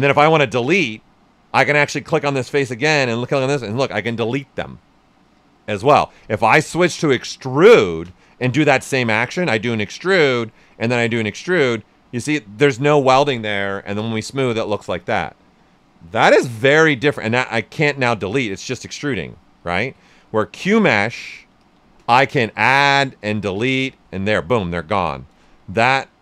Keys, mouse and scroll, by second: 2.0 click, 6.4 space, 9.2-13.9 drag, 13.9 d, 16.2 shift+d, 17.9-19.6 drag, 19.6 ctrl+z, 20.5 space, 21.5 click, 22.3 click, 24.0 right click, 25.2-26.2 alt+drag.